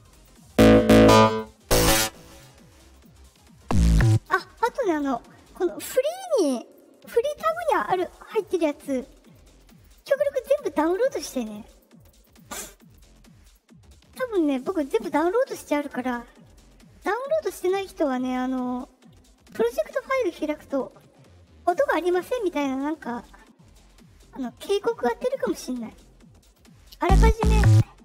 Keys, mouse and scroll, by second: 0.1 click, 1.2 click, 2.2 click, 2.9 click, 4.8 click, 8.3 click, 9.2 click, 9.5 click, 9.7 click, 9.8 click, 10.0 click, 10.8 click, 10.9 click, 11.1 drag, 11.3 click, 11.4 drag, 11.6 click, 11.9 click, 12.1 click, 12.2 click, 12.4 click, 12.6 click, 12.8 click, 13.3 click, 26.4 click.